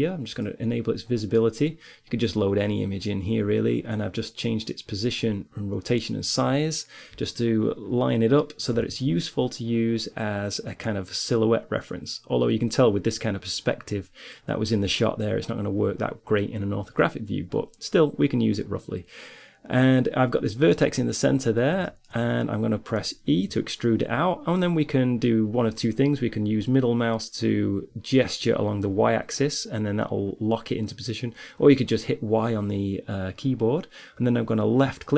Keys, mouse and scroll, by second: 2.3-9.0 middle drag, 9.0 n, 21.3-23.7 middle drag, 23.7 e.